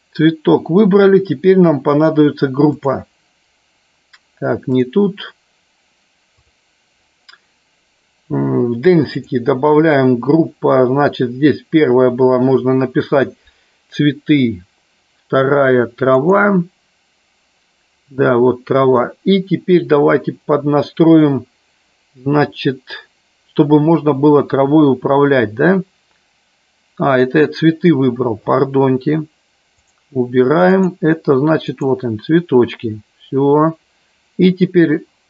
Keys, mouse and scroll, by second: 2.7 click, 4.6 click, 9.2-16.5 drag, 30.7-32.1 drag.